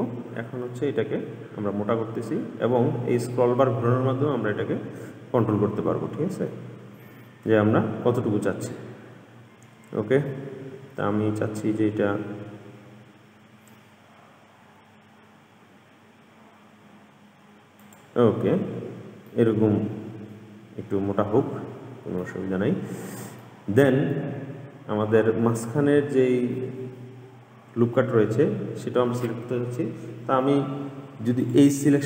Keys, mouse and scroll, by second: 18.8-19.5 scroll up 1, 19.5-22.5 middle drag, 23.6-26.7 middle drag, 31.6 click.